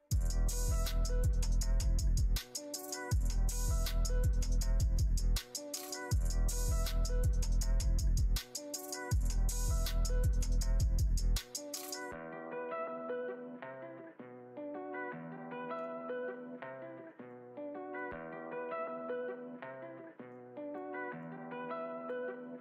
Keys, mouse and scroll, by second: 2.2 click, 3.9 click, 5.8 click, 6.4 click, 6.7 click, 7.3 click, 8.7 click, 10.4-15.7 middle drag, 17.2 click, 20.3 click, 21.1 click.